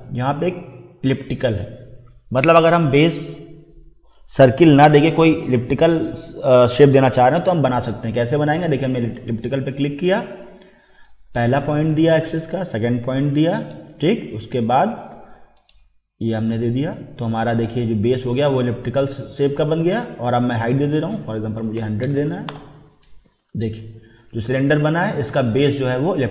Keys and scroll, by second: 21.8 1, 22.0 0, 22.5 Return.